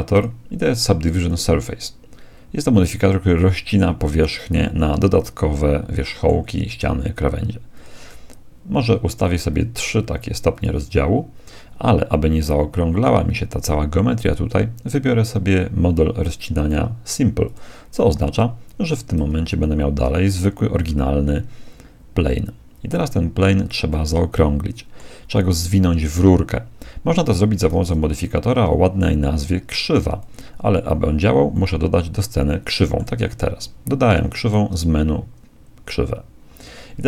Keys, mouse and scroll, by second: 0.1-3.1 drag, 3.9 z, 4.7-6.5 middle drag, 7.7-12.3 drag, 17.5-18.5 drag, 19.4 z, 20.9-22.9 middle drag, 23.9-25.9 middle drag, 27.7 shift+a, 31.5-33.5 middle drag, 34.5 shift+a.